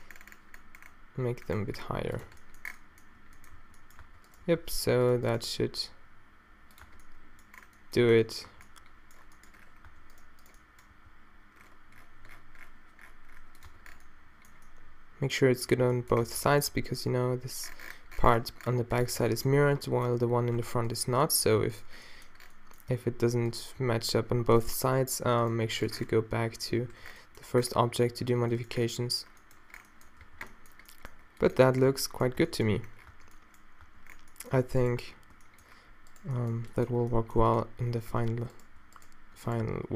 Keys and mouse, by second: 2.3 Tab, 3.6 a, 4.1 Tab, 4.5 g, 5.4 g, 6.9 Tab, 8.1 a, 8.5 a, 9.9 Tab, 10.9 g, 13.7 Tab, 14.1 middle click, 15.8 Tab, 16.3 Tab, 16.6 click, 16.7 Tab, 17.4 g, 19.3 Tab, 20.6 Tab, 21.5 g, 22.1 click, 22.9-24.6 drag, 23.8 g, 26.7 g, 27.0 Tab, 30.3 a, 31.9 Tab, 32.4 Tab, 32.8 Tab, 33.1 Tab, 33.9 Tab, 34.6 Tab, 35.0 Tab, 39.6 d.